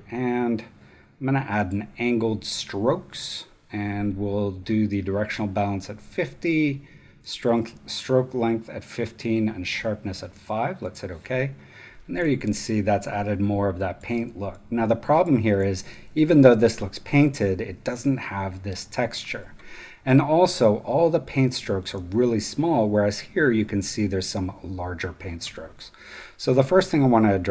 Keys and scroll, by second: 12.1 space, 13.8 super+space, 15.5 super+space.